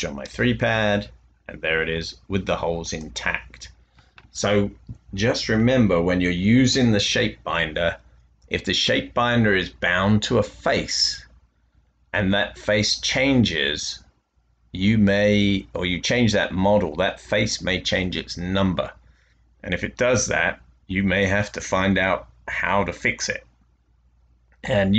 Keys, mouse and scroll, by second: 0.2-1.4 typing, 2.8 click.